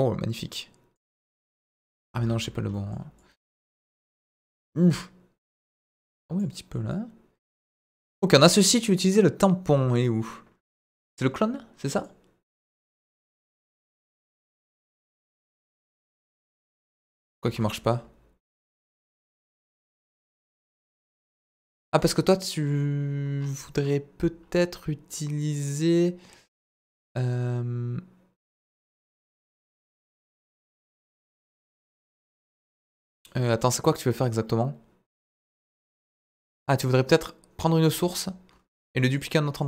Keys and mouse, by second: 0.9 click, 1.2 middle click, 2.3 ctrl+z, 2.7 middle click, 3.2-6.4 drag, 6.5 middle click, 7.3 click, 7.7 middle click, 11.9 click, 13.4-15.2 drag, 15.6 ctrl+z, 15.9 middle click, 16.6 click, 17.4 ctrl+z, 21.9 middle click, 29.5 click, 30.7 click, 31.3 click, 32.4 click, 39.5 click.